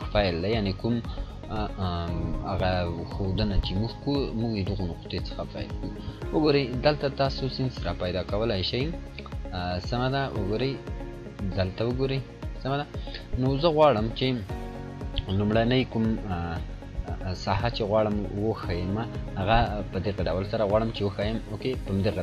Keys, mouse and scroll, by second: 6.7-7.1 scroll down 1, 20.3-21.0 click, 21.3 scroll up 1.